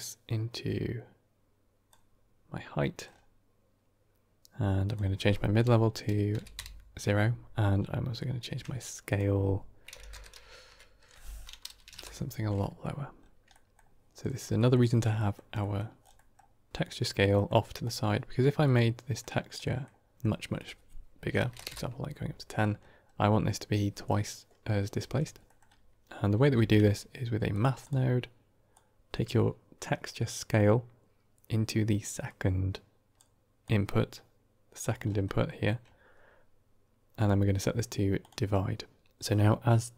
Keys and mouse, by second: 2.7 middle drag, 4.8-7.3 drag, 7.7-8.1 middle drag, 8.9-12.3 drag, 13.4 middle drag, 14.4 middle click, 15.0 middle click, 15.6 middle click, 16.2 middle click, 18.5 middle click, 19.4 middle click, 20.4-21.9 drag, 25.4 middle click, 26.4 q, 28.6-33.0 drag, 33.5-34.7 drag, 35.4 middle click, 37.1-38.1 drag.